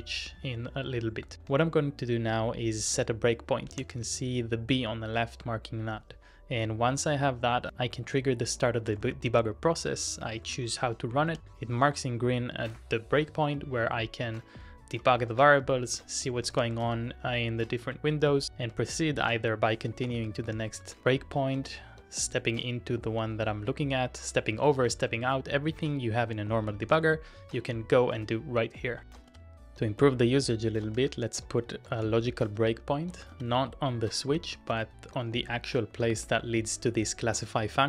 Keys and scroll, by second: 1.4 typing, 3.6-4.5 typing, 8.6-13.4 typing, 15.3 ctrl+w, 15.5-21.1 typing, 24.4 Tab, 24.5-25.4 typing, 29.0-32.5 typing, 32.7 Up, 33.3 Return, 34.4 ctrl+d, 34.8 ctrl+d, 35.1 ctrl+d, 37.4 j, 37.6 j, 37.7 j.